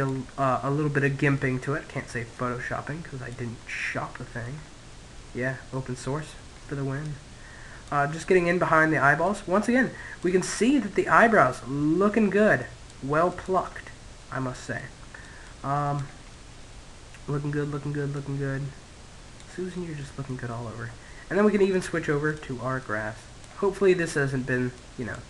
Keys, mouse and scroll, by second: 2.4-5.8 middle drag, 5.8 click, 6.7-8.5 middle drag, 8.0 click, 9.1-11.8 middle drag, 11.2-15.9 drag, 15.7-16.8 middle drag, 16.8 click, 18.5-20.2 middle drag, 20.9 click, 22.3 middle click, 23.1 middle click, 23.3-25.2 drag.